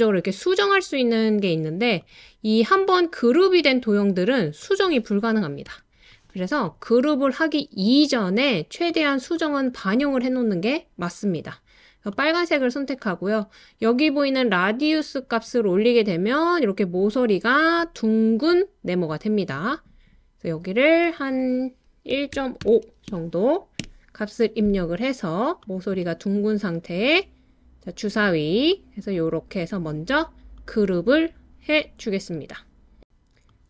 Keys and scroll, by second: 5.7 typing, 21.9-23.9 typing.